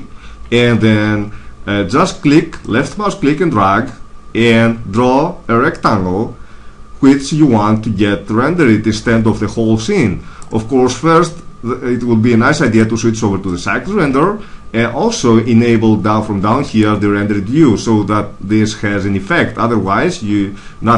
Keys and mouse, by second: 12.5-14.4 drag, 16.5-18.4 drag.